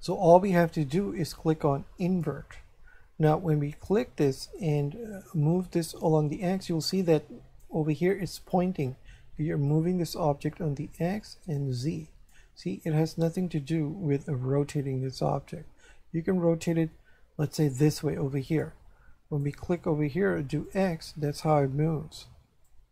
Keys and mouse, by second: 2.0 click, 3.7 right click, 5.3 click, 9.7 click, 11.5 click, 13.1 right click, 14.2 r, 18.5 click, 19.4 right click, 20.6 click, 22.6 click.